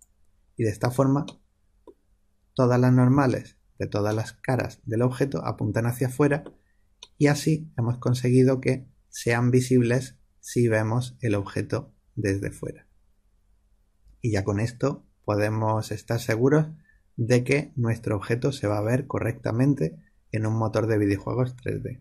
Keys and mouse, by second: 1.2-2.8 middle drag, 3.0 a, 8.7-10.1 middle drag.